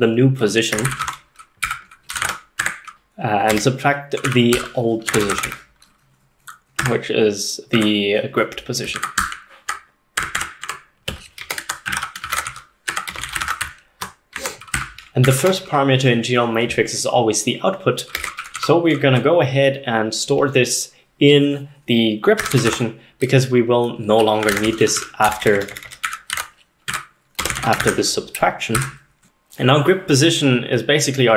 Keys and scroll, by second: 0.5-3.4 typing, 3.6 Escape, 4.6-6.8 typing, 6.8 Tab, 7.8 Tab, 9.0-9.7 typing, 10.2 Tab, 10.4 Tab, 10.7 Tab, 11.4-15.3 typing, 17.9-19.1 typing, 22.2-23.2 typing, 24.2-29.3 typing, 26.9 Tab.